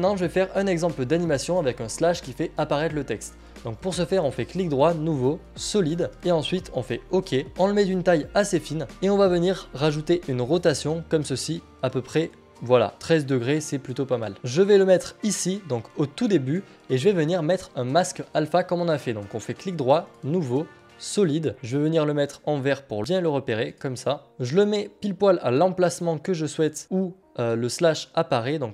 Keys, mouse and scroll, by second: 1.2 ctrl+z, 4.3 right click, 8.9 click, 12.3 click, 12.3 r, 13.6-19.4 drag, 13.6 r, 20.3-23.7 right drag, 24.3 click, 26.0 click, 28.0 click.